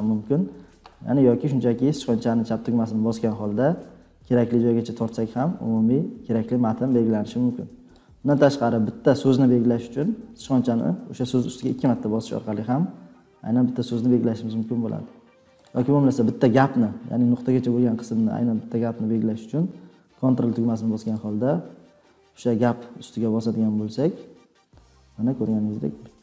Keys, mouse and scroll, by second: 7.8 click, 8.3 click, 11.6 click, 11.8 click, 15.6 click, 21.1 ctrl+scroll.